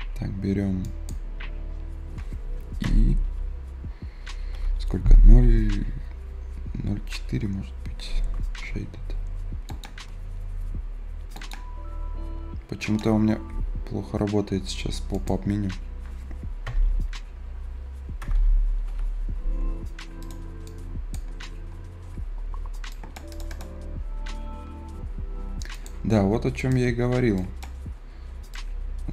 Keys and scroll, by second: 2.8 `, 3.3 ï, 4.5 BackSpace, 8.6 ctrl+alt+s, 13.2 a, 16.3-18.7 typing.